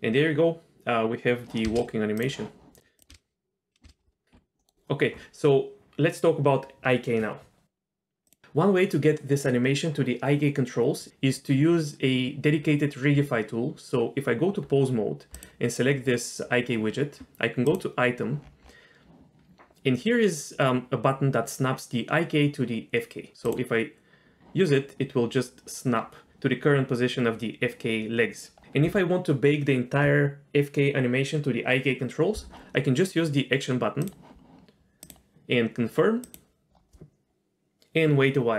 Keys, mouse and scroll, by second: 1.7 space, 2.2 click, 3.0 click, 3.1 space, 3.8 space, 4.6 middle click, 4.6 z, 8.3 click, 13.1 Tab, 15.3 click, 17.7 click, 18.4-19.1 scroll down 3, 23.4 click, 34.0 drag, 35.0-38.5 drag.